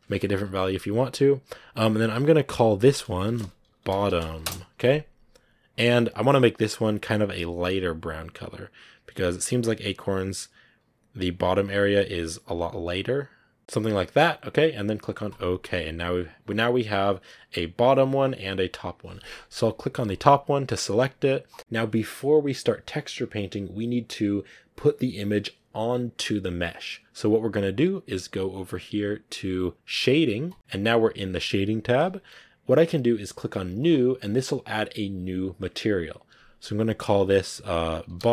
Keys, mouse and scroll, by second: 4.3 t, 30.5 click, 30.8 scroll up 3, 31.9 KP_Decimal, 33.8-38.3 drag.